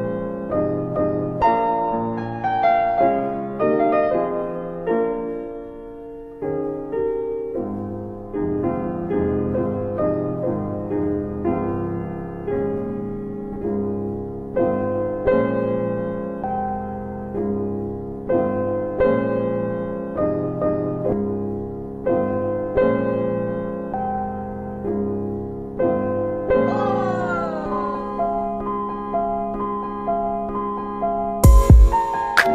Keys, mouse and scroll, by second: 1.0 click, 3.5 ctrl+click, 5.6 ctrl+BackSpace, 7.6 click, 9.2 middle click, 9.5-10.0 scroll down 1, 10.6 alt+middle click, 12.8 alt+middle click, 14.0-15.7 scroll up 1, 15.7 shift+click, 18.5 alt+middle click, 18.7 middle click, 20.5 alt+middle click, 22.1 alt+w, 22.3 alt+w, 23.1 alt+w, 23.8 middle click, 25.1 click, 30.1 alt+w, 31.2 alt+middle click, 31.6 w.